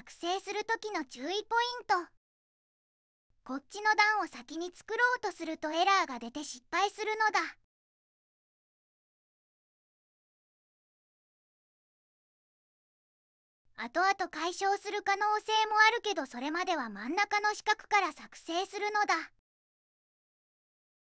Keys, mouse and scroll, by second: 0.3 click, 1.1 shift+click, 2.2 click, 3.1 middle click, 6.2 click, 11.3 middle click, 12.8 ctrl+z, 13.4 ctrl+z, 15.6 click, 18.2 middle click, 19.5 click, 20.1-21.0 typing.